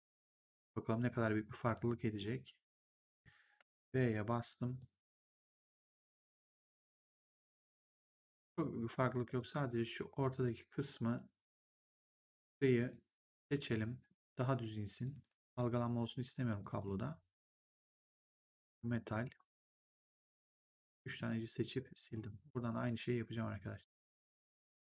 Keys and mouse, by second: 3.6 b, 6.0 3, 6.5 click, 8.3 click, 9.0 1, 12.7 right click, 15.0 click, 18.3 shift+click, 21.1 click.